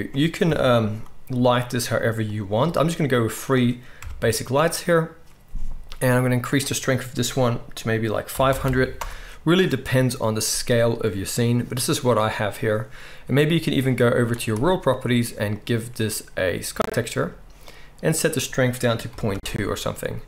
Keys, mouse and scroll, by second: 0.4 KP_7, 1.3 r, 2.5 g, 3.9 KP_0, 4.3-6.4 drag, 8.6 0, 14.5-15.6 drag.